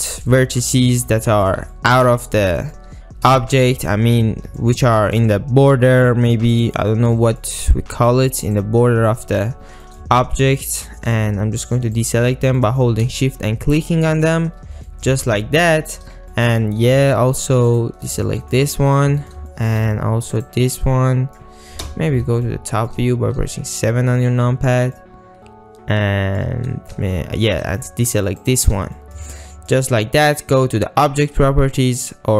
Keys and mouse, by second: 0.0 shift+middle click, 0.6 ctrl+middle click, 1.2 shift+click, 1.8 ctrl+click, 2.3 shift+middle click, 3.4 shift+middle click, 4.0 ctrl+middle click, 4.7 shift+middle click, 5.0 ctrl+middle click, 7.2 shift+middle click, 9.9 ctrl+middle click, 10.2 shift+middle click, 10.7 shift+middle click, 11.1 ctrl+middle click, 12.0 shift+middle click, 12.7 shift+middle click, 14.2 shift+middle click, 14.9 shift+middle click, 15.4 ctrl+middle click, 16.4 ctrl+middle click, 17.8 shift+click, 18.4 ctrl+middle click, 18.8 shift+middle click, 19.3 ctrl+middle click, 19.6 shift+middle drag, 20.9-21.5 middle drag, 21.9 KP_7, 22.6 shift+middle click, 25.1-26.5 shift+middle drag, 28.6 shift+click, 29.0 shift+middle click, 29.5 ctrl+middle click.